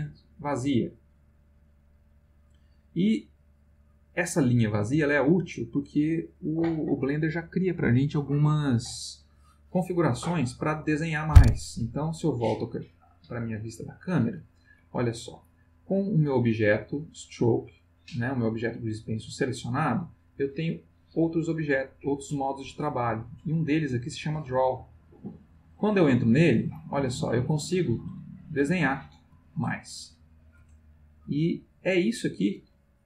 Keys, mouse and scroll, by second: 0.3-5.3 middle drag, 13.1 click, 20.9 click, 24.5 click, 26.7 click, 27.7-30.5 drag, 31.7 click, 32.6-33.0 drag.